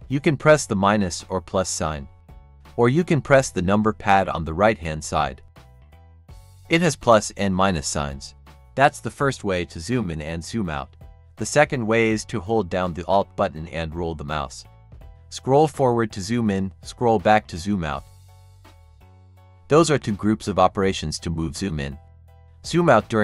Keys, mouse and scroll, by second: 0.5 ctrl+-, 1.8 ctrl+=, 2.2 ctrl+-, 3.0 ctrl+=, 13.8 alt+scroll up 1, 16.0-17.7 alt+scroll down 1, 18.4-19.4 alt+scroll down 1, 19.4-20.0 alt+scroll up 2, 20.0-20.6 scroll up 1, 22.2-22.7 alt+scroll up 2, 22.9 alt+scroll down 1.